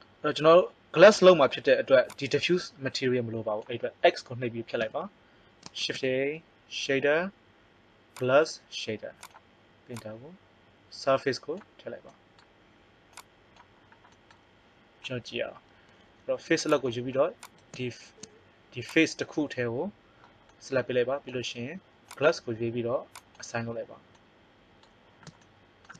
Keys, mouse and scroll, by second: 0.1 click, 2.1 click, 4.8 x, 5.7 shift+a, 9.9-12.0 drag, 12.0 middle click, 13.1-15.0 drag, 16.6 click, 20.5 middle click, 22.0-23.7 drag, 23.7 middle click, 24.1 click, 24.2 middle click.